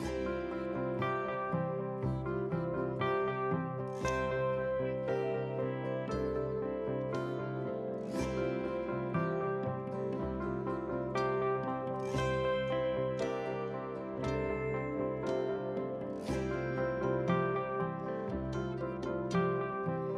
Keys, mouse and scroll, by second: 0.2 click, 0.4 click, 1.5 Tab, 2.1 ctrl+r, 3.2 g, 3.8 click, 4.4 ctrl+r, 5.7 click, 6.2 ctrl+r, 7.9 g, 8.8 alt+click, 9.2 g, 10.1 s, 10.8 click, 11.0-11.4 scroll down 3, 11.4 middle click, 11.8 drag, 12.2 click, 12.4 click, 13.0 click, 13.1-15.3 drag, 14.8 KP_0, 15.4 click, 15.7 click, 16.3 KP_1, 17.0-17.7 scroll down 4, 17.8 scroll down 1, 17.9 shift+d, 19.9 shift+click.